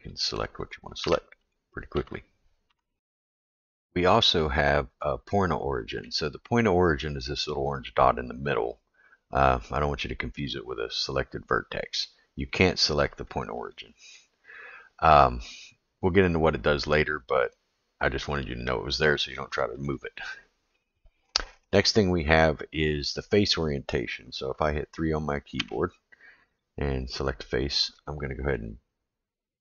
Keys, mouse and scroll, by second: 0.2 click, 0.7 click, 1.0 1, 1.5 click, 1.9 2, 2.7 2, 4.5-6.0 middle drag, 12.6 click, 13.1 click, 13.7 click, 14.0 click, 19.5 click, 19.8 click, 23.2 middle click, 25.6 3, 26.6 click, 27.9 middle click.